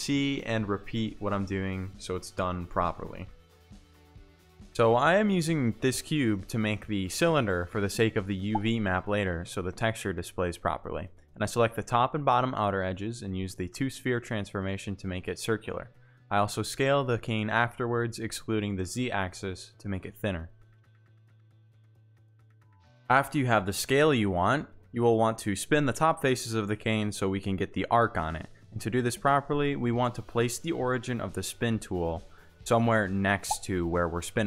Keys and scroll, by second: 1.5 alt+shift+s, 4.0 1, 4.9 Return, 5.6 s, 5.9 shift+z, 10.4 shift+z, 15.4 c, 18.6 shift+space, 25.0 shift+space, 27.2 ctrl+z.